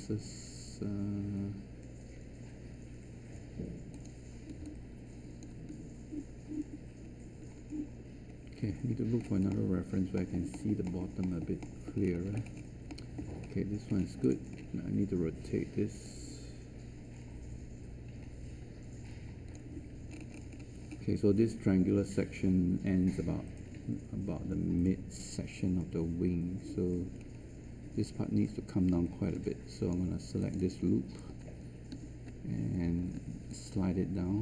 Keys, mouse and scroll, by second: 31.9 w.